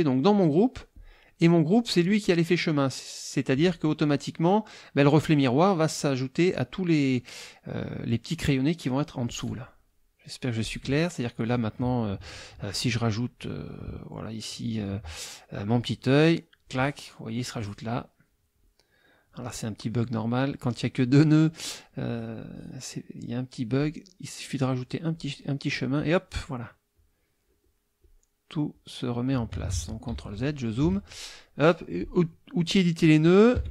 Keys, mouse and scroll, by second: 0.9 click, 3.6 click, 10.6 click, 15.9-16.8 drag, 23.8-25.3 drag, 26.9-28.2 drag, 28.7 click, 29.7 ctrl+z, 30.3 ctrl+click, 30.8 ctrl+F2, 31.9 click, 33.5 F6.